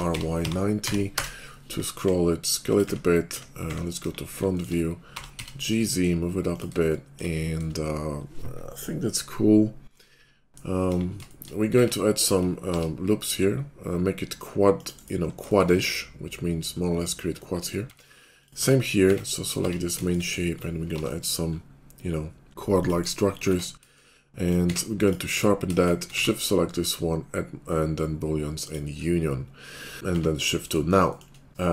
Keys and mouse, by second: 1.9-4.0 typing, 2.8-4.0 middle drag, 4.4 shift+middle click, 5.1 g, 6.7 shift+middle click, 10.8 KP_5, 11.1 shift+click, 11.8 Tab, 12.3 ctrl+click, 12.6 ctrl+r, 15.4 shift+click, 17.8 Tab, 18.6 Tab, 19.0 Tab, 19.6 Tab, 20.9 ctrl+r, 23.5 Tab, 24.6 q, 25.8 shift+click, 26.5 q, 30.1 shift+2.